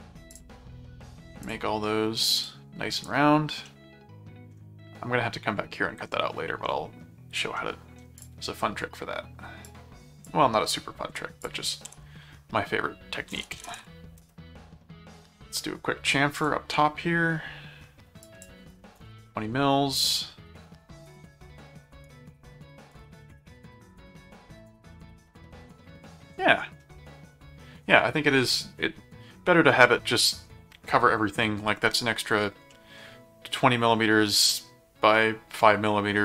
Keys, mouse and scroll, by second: 0.3 click, 1.4 click, 2.3 click, 3.1 right click, 3.6 middle click, 7.5 middle click, 8.2 click, 9.7 click, 11.4 click, 11.9 s, 13.1-14.2 typing, 16.4 click, 18.2 click, 21.0 click, 22.0 right click, 22.9 click, 23.5-26.8 middle drag, 32.7 middle click.